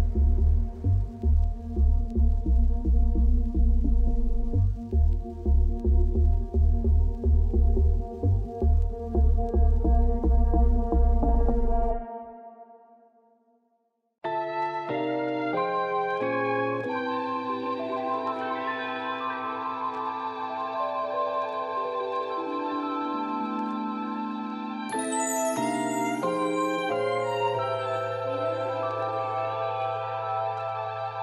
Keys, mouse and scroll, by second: 2.2-5.9 middle drag, 5.9 Tab, 7.6 click, 8.5 middle click, 8.9-12.0 drag, 15.5 click, 18.1-19.3 drag, 19.3 middle click, 22.0-23.2 middle drag, 24.0 click, 24.4 KP_Divide, 25.0 click, 26.2-28.8 shift+middle drag.